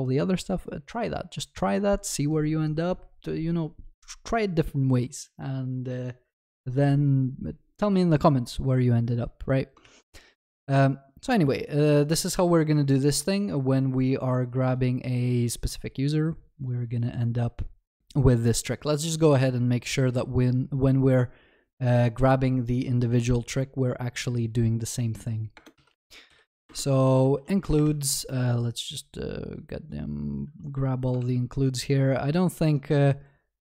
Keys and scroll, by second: 9.9 ctrl+s, 26.7 Return, 31.2 ctrl+c.